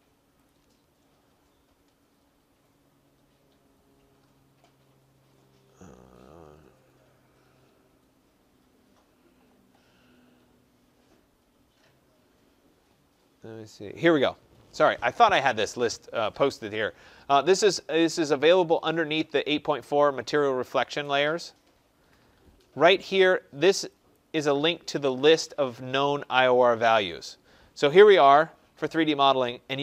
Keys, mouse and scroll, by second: 0.4 click, 2.0 middle click, 2.2 middle click, 2.3 middle click, 2.4 middle click, 2.9 middle click, 3.0-5.3 scroll, 5.3 scroll, 17.3-18.4 scroll, 20.5-23.3 scroll down 21, 24.1 click, 26.8 scroll, 27.9-29.2 scroll.